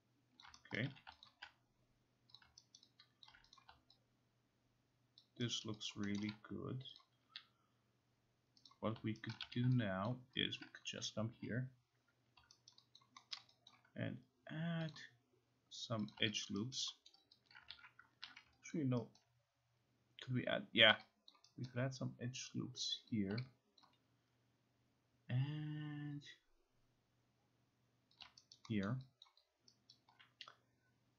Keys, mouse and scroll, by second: 0.4 click, 0.8 right click, 0.9 q, 1.3 alt+click, 2.4 click, 2.8 alt+right click, 3.3 alt+click, 3.6 click, 5.2 alt+click, 5.7 alt+right click, 6.2 alt+middle click, 7.0 click, 7.3 q, 8.7 click, 9.3 right click, 9.5 q, 10.1 alt+click, 10.6 alt+click, 11.0-11.8 typing, 12.7 alt+right click, 13.0 alt+click, 13.4 alt+middle click, 13.7 alt+middle click, 14.9 click, 16.1 click, 16.5 alt+click, 17.1 alt+middle click, 17.1 alt+right click, 17.5 alt+click, 17.7 ctrl+z, 18.3 ctrl+z, 18.7 alt+click, 19.2 alt+right click, 20.9 alt+right click, 21.3 alt+click, 21.7 alt+right click, 23.1 click, 23.8 alt+click, 28.3 alt+click, 28.5 alt+right click, 28.9 alt+middle click, 29.3 alt+click, 29.9 alt+right click.